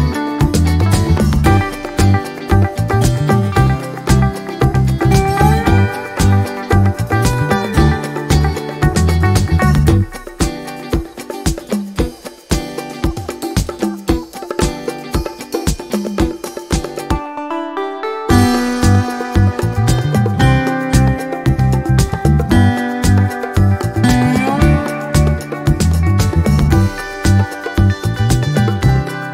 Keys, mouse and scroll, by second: 1.4 click, 2.5-3.9 drag, 4.3 click, 4.8-5.1 ctrl+scroll up 2, 5.8 ctrl+click, 6.6 click, 7.1 click, 8.1 Delete, 9.0 click, 9.8 ctrl+d, 10.8 shift+click, 11.3 shift+click, 12.5 click, 13.6 click, 15.1 click, 15.9-17.1 drag, 17.8 click, 19.1 click, 19.9-21.0 ctrl+shift+drag, 22.0 click, 23.0 ctrl+x, 23.4 ctrl+click, 24.1 ctrl+v, 25.1 click, 25.5 ctrl+scroll up 2, 25.9 ctrl+click, 26.9-28.4 drag, 28.5-29.3 ctrl+scroll down 4.